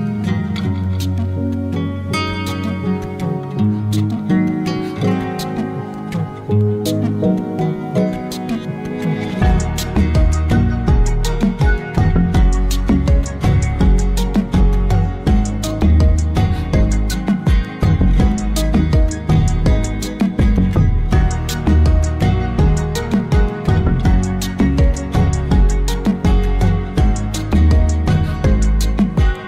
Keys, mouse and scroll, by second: 2.7-5.1 drag, 6.1 Delete, 6.9-10.5 drag, 12.0 shift+a, 19.7 click, 21.2 click, 24.0-24.8 scroll up 3, 28.9 click.